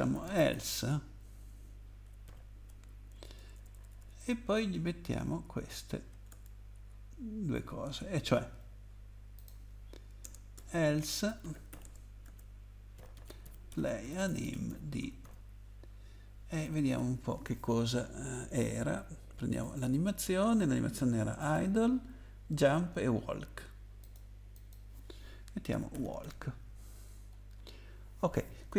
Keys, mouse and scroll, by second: 0.0-0.5 typing, 2.2 :, 3.1 Down, 3.4 Left, 3.5 Left, 5.4 shift+Down, 5.7 shift+Down, 6.3 Tab, 6.8 Up, 9.4 click, 10.2 Return, 10.6-11.7 typing, 11.8 Return, 12.2 Tab, 12.9-15.2 typing, 16.6 typing, 17.7 scroll down 1, 19.6 click, 21.4 click, 24.0 click, 24.5 click, 25.7-26.2 typing, 27.3 scroll down 1.